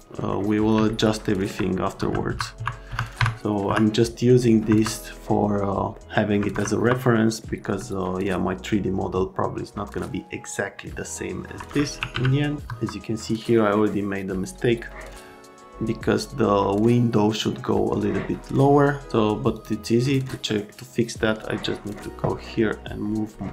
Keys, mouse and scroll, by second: 0.3 right click, 0.9 alt+middle click, 2.0 F3, 2.3 F3, 2.6 F3, 2.9 F3, 3.1 F3, 3.7 F3, 4.7 F3, 5.1 right click, 5.9 alt+right click, 6.5 F3, 6.8 F3, 7.2 middle click, 12.1 z, 12.6 F3, 19.5 click, 20.0 click, 20.4 right click, 21.4 click, 22.3 right click, 23.3 right click.